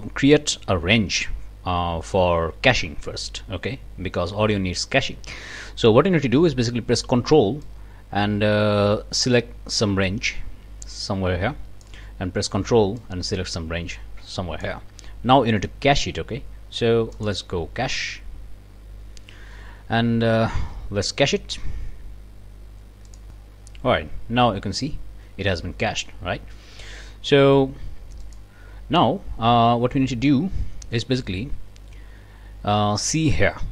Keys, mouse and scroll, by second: 7.6-12.0 ctrl+drag, 13.0-14.8 ctrl+drag, 17.2 click, 23.2 click, 28.2 click.